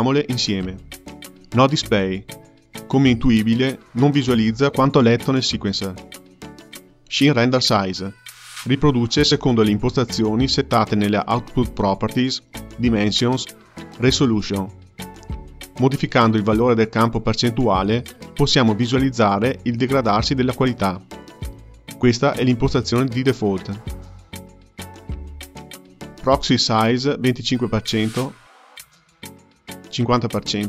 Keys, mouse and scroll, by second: 3.8 space, 4.5 space, 6.1-9.2 drag, 10.2 space, 12.1 space, 14.7-17.7 drag, 17.8 space, 19.7 space, 20.7-22.1 drag, 22.1 KP_0, 26.2-30.6 drag.